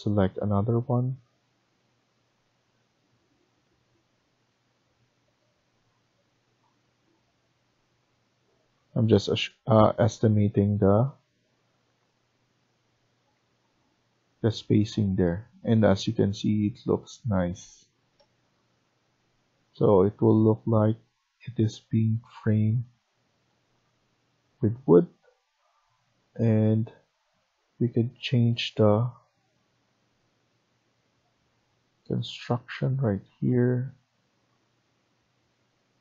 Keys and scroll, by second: 13.0 Escape, 13.0 scroll up 2, 13.3 Escape.